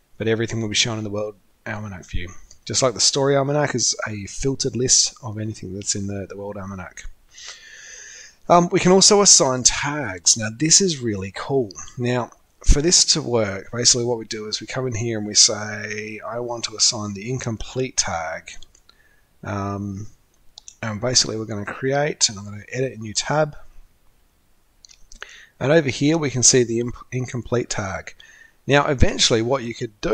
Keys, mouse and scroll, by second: 22.4 click.